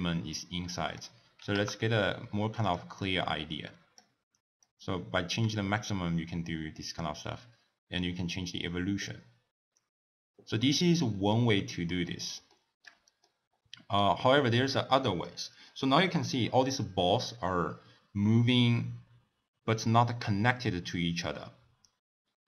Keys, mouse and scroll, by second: 3.0-7.7 drag, 8.0-11.0 drag, 11.6-12.3 scroll down 1, 12.3 scroll down 2, 12.5-16.2 shift+middle drag, 16.2-19.0 scroll up 1.